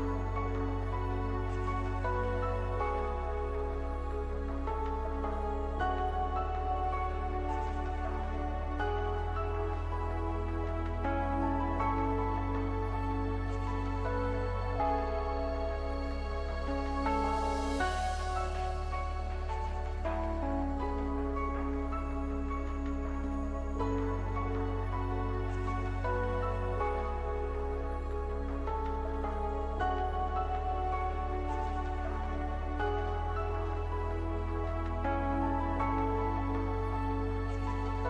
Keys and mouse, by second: 8.0 w, 9.2 w, 12.8 ctrl+Tab, 13.6-16.0 drag, 17.6-21.6 right drag, 20.5 o, 21.6-23.8 middle drag, 21.6 s, 24.8 middle click, 25.6 Tab, 27.6 ctrl+1, 30.4-33.6 drag, 31.5-33.6 right drag, 33.6 shift+d, 37.0-38.0 middle drag.